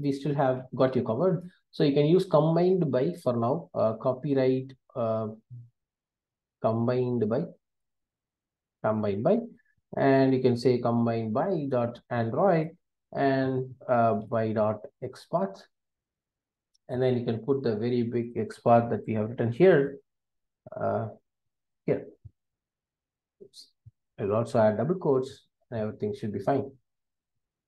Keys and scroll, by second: 2.7 Return, 11.6 Return, 16.1 Return, 20.4 super+x, 21.9 super+v, 23.4 super+z, 24.6 super+v.